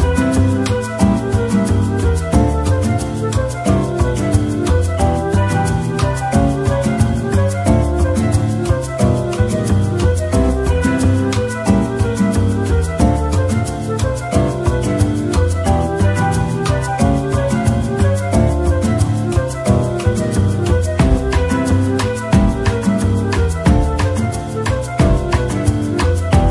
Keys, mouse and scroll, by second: 2.2-3.2 typing, 4.0 scroll down 1, 4.3 middle click, 5.3-5.7 scroll down 1, 5.7 middle click, 12.0 scroll up 1, 13.2-13.5 scroll up 1, 13.5 shift+double click, 14.3 typing, 15.2 Tab, 15.6 middle click, 17.5 middle click, 17.9 ctrl+l, 18.7-19.7 typing, 22.0-23.1 typing, 22.1 ctrl+l.